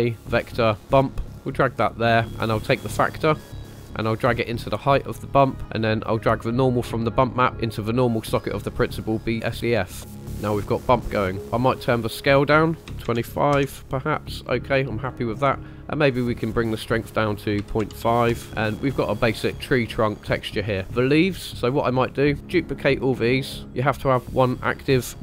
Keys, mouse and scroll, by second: 3.2-5.4 drag, 6.5-7.5 drag, 9.1 middle click, 10.0 middle click, 10.4 scroll up 1, 11.4 click, 12.1-13.5 drag, 14.3-14.8 scroll down 2, 15.0 scroll up 2, 16.0-16.8 scroll up 2, 16.8 click, 18.4 scroll down 4, 18.5-19.6 middle drag, 19.6 scroll up 2, 19.7-20.1 shift+middle drag, 20.2 middle click, 20.8 scroll down 3, 21.0-21.4 shift+middle drag, 21.6-22.1 scroll down 4, 22.3-23.2 drag.